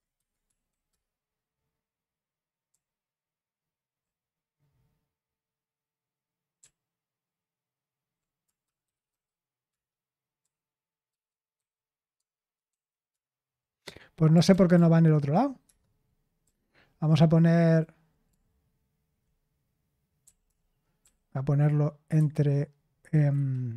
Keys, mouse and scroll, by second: 0.4 Right, 0.9 Return, 2.7-3.9 typing, 6.5-9.6 typing, 9.7 Return, 10.8-12.1 typing, 12.6 Right, 13.1 Return, 13.3 typing, 14.5 ctrl+p, 14.7 ctrl+p, 15.6 Return, 16.4-19.0 typing, 20.2 l, 20.4 l, 21.0 i, 23.1 Delete, 23.3 Escape.